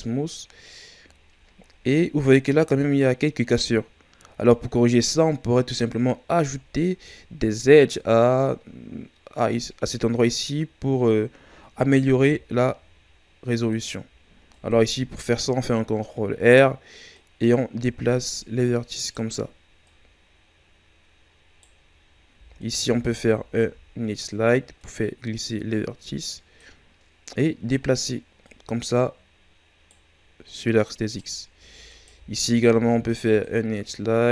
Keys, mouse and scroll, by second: 1.4-1.9 shift+scroll down 3, 1.9-4.3 scroll up 1, 6.1-6.7 ctrl+scroll down 1, 6.7-7.4 shift+scroll down 1, 7.4 Tab, 12.1 ctrl+r, 16.4-17.1 scroll up 1, 17.1 right click, 19.8 right click, 22.6 alt+right click, 23.5 ctrl+e, 28.4 right click, 30.4 right click, 31.8 alt+right click, 32.7 ctrl+e.